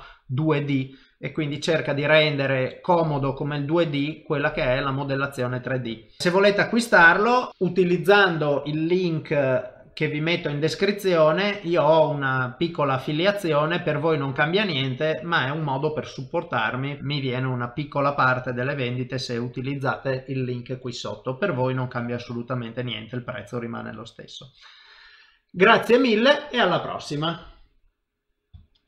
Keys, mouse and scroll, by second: 2.7 middle click, 6.2 shift+middle click, 6.2 middle click.